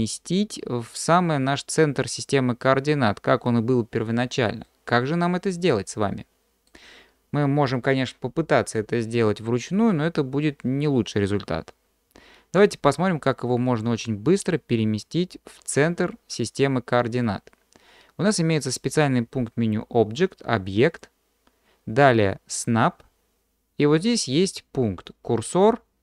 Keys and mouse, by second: 4.7-6.7 middle drag, 20.9-26.0 drag.